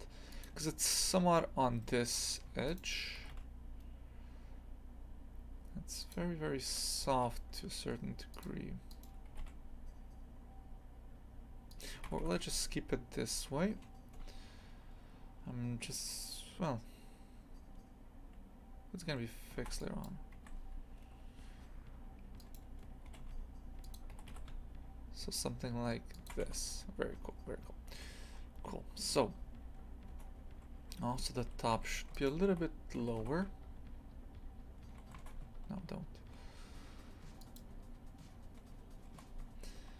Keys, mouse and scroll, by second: 2.1-2.5 scroll up 1, 2.5 1, 2.7 right click, 3.2 g, 6.6 right click, 7.0 g, 8.9 right click, 9.3 g, 12.0 ctrl+z, 12.2 ctrl+z, 14.2 a, 19.5 ctrl+r, 22.4 right click, 23.1 g, 24.1 g, 26.4 Tab, 26.7 scroll down 1, 27.9 a, 28.3 scroll up 2, 30.1 Tab, 31.1 2, 31.4 1, 31.7 2, 32.1 alt+shift+right click, 33.0 g.